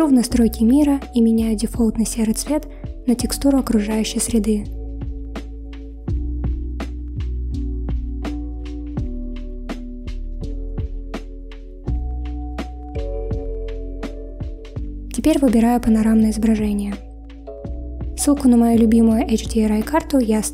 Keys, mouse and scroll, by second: 0.2 click, 5.1-8.2 drag.